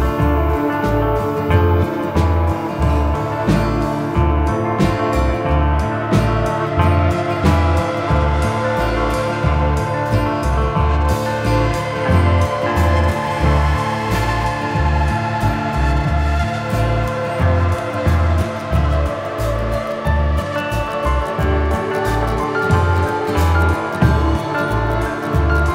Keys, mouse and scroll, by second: 3.3 middle click, 5.9 click, 6.5 shift+middle click, 7.2 right click, 8.3 middle click, 9.9 shift+middle click, 10.5 scroll up 1, 10.8 middle click, 12.6 g, 14.8 middle click, 19.9 shift+middle click, 20.6 middle click, 21.5-22.1 scroll down 2, 22.1 shift+a.